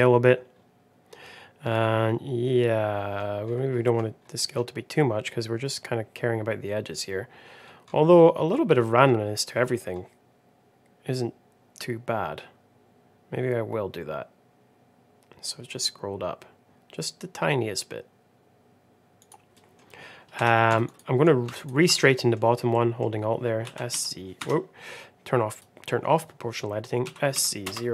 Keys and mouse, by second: 19.4 middle click, 20.3 2, 20.8 alt+click, 21.5 alt+click, 21.9 middle click, 22.6 middle click, 23.5 s, 25.4 click, 26.9 s.